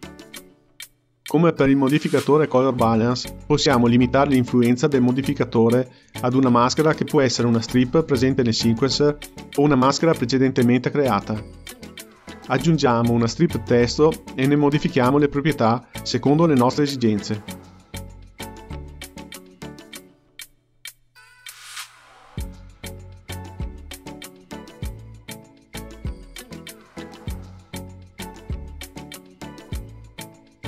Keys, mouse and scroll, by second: 0.0 Left, 4.6 shift+a, 8.8 click, 10.0-15.7 drag, 18.1-19.5 drag, 19.5 KP_0, 25.6 h.